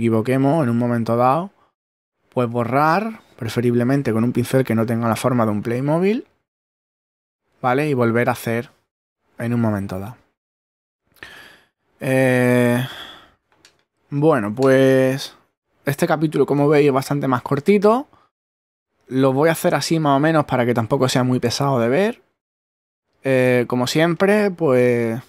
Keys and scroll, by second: 15.3 ctrl+Tab.